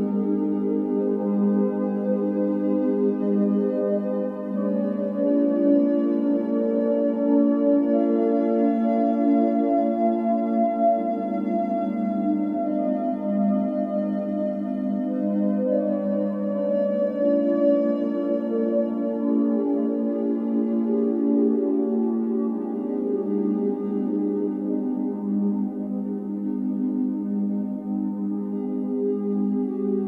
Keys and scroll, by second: 0.0-0.1 typing, 4.5 Escape, 5.8 o, 7.6 space, 10.9 8, 12.4 Escape, 13.1-13.5 typing, 16.5-17.3 typing, 18.1 Return, 21.1 Escape, 22.0-22.8 typing, 24.6-25.9 typing, 28.4 Escape, 29.1 o.